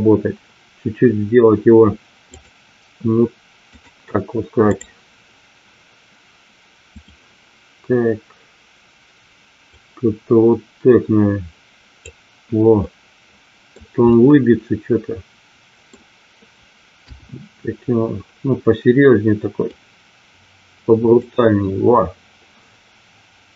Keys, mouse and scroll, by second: 2.3 click, 3.7-5.1 drag, 6.9 click, 9.8-12.3 drag, 12.8 middle click, 14.2-15.8 middle drag, 17.0 KP_1, 19.8-21.3 drag.